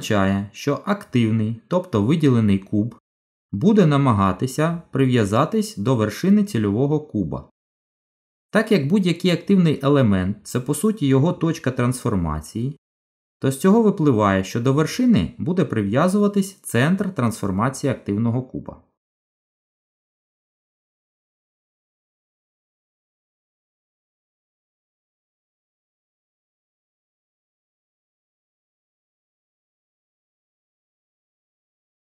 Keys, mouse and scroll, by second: 19.7 g, 30.1 z.